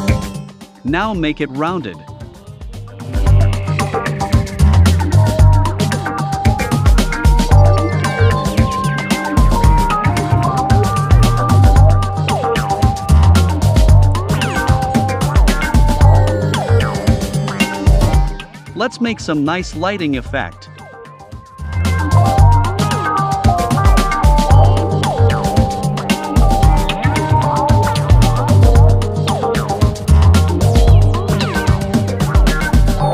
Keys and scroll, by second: 8.2 v, 20.6 super+c, 21.0 super+f.